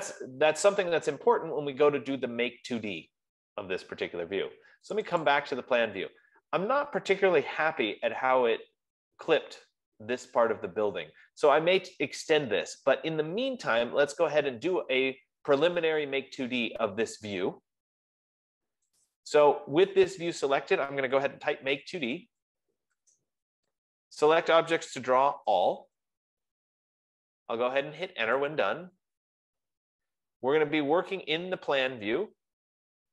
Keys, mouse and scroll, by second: 5.5 click, 5.8 click, 19.6 click, 21.9-23.0 typing, 23.2 Return, 24.5-26.5 typing, 28.7 Return.